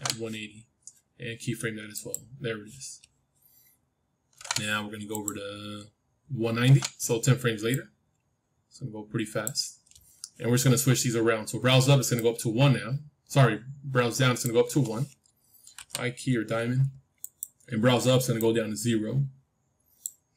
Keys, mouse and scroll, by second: 1.9-3.9 drag, 7.6-9.6 drag, 12.1-14.1 drag, 15.7 i, 17.1-20.3 drag.